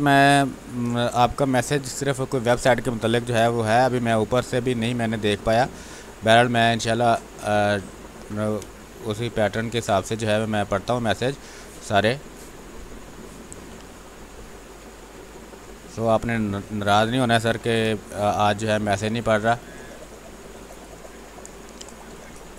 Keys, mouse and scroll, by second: 0.3 w, 1.4 shift+click, 2.5 click, 3.0 b, 3.3 space, 3.5 click, 3.8 space, 4.7 ctrl+z, 8.1 b, 8.5 space, 8.8 click, 9.1 space, 10.5-12.2 drag, 12.2-15.0 drag, 15.0 w, 17.0 click, 17.4 b, 17.8 space, 18.0 click, 18.3 space, 19.3 x, 19.6-21.5 drag, 21.5 click.